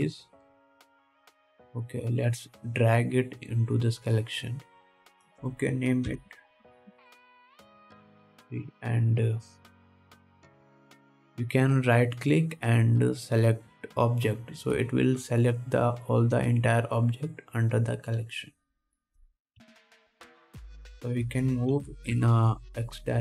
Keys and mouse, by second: 1.8 click, 3.3-4.9 middle drag, 6.3 click, 8.6 e, 11.0-11.6 drag, 11.6-16.8 drag, 18.3-20.0 drag, 20.8 KP_1, 22.6-23.2 drag, 22.6-23.2 middle drag, 22.6-23.2 right drag, 23.0 g.